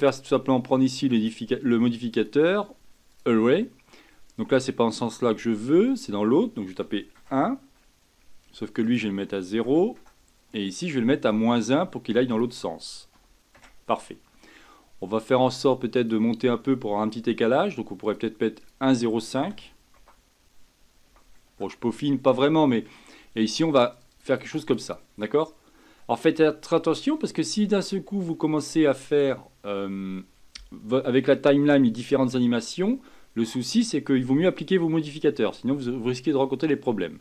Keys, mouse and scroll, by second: 1.1 click, 2.1-5.1 drag, 5.9-14.2 drag, 15.9 click, 18.0-21.0 drag, 22.4 scroll down 2, 23.9-25.0 drag, 25.2-25.9 scroll down 6, 25.9-27.3 middle drag, 27.3-27.9 scroll up 5, 27.9-28.3 scroll down 1, 28.3-37.2 middle drag.